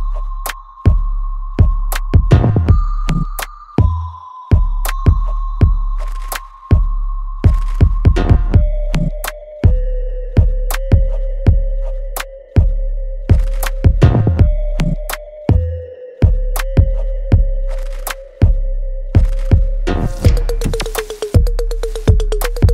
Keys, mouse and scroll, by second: 0.0 alt+right click, 1.1-3.0 alt+middle drag, 3.0 click, 5.7 click, 5.8 alt+right click, 6.7 alt+middle click, 7.2 alt+right click, 8.1 alt+click, 8.8 alt+middle click, 9.2 alt+right click, 9.9 alt+middle click, 10.6 alt+click, 11.3 alt+middle click, 12.0-14.1 alt+right drag, 14.1 click, 14.1 click.